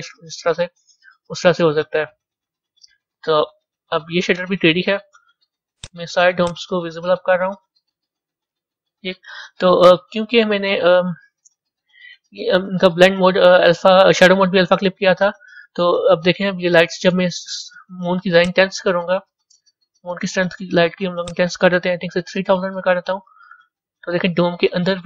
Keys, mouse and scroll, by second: 1.3 ctrl+z, 2.7-5.7 middle drag, 5.7 click, 6.7 click, 7.8-8.7 scroll down 5, 9.0 scroll up 2, 9.7-11.7 middle drag, 11.7-12.4 scroll down 3, 12.4-13.5 scroll up 2, 13.5-15.6 middle drag, 15.6-16.2 scroll down 1, 16.2-17.1 middle drag, 17.1-18.5 scroll down 1, 18.5 click, 23.5 KP_0, 24.8-25.0 scroll up 4.